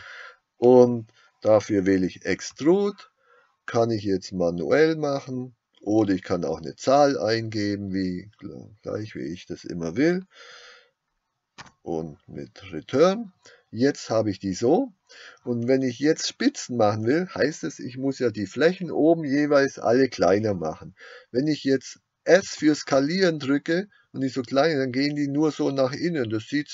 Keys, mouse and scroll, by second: 2.3 e, 11.7 Return, 22.5 s.